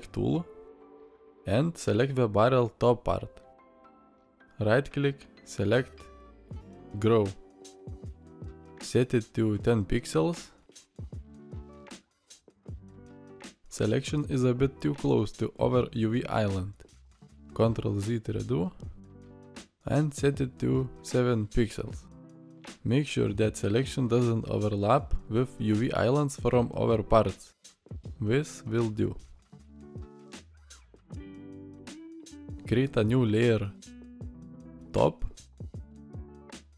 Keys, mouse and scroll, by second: 17.5 ctrl+z.